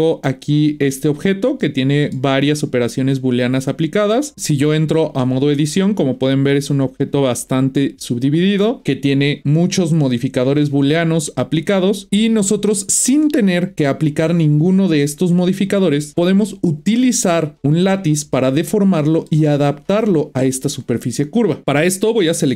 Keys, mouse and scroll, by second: 0.6 click, 1.6-4.3 middle drag, 4.3 click, 5.2 Tab, 8.8 Tab, 17.8-18.6 middle drag, 18.6-19.0 scroll down 1, 19.0-21.6 shift+middle drag, 22.3-22.5 middle drag.